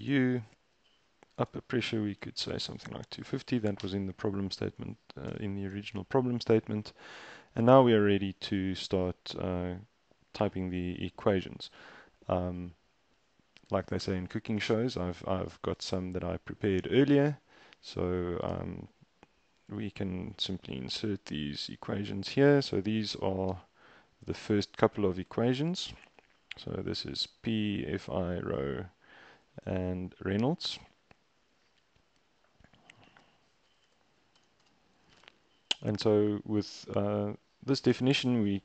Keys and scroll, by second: 1.3-3.2 typing, 5.3 shift+Return, 19.7 super+c, 21.9 super+v, 23.5 shift+Return, 25.3 super+Tab, 29.3 super+Tab, 33.9 space, 34.4 shift+Return, 34.6 shift+Return.